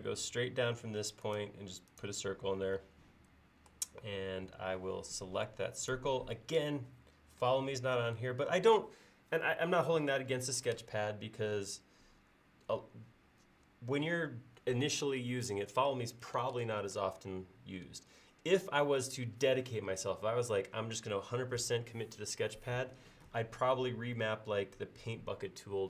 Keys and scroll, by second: 5.2 space.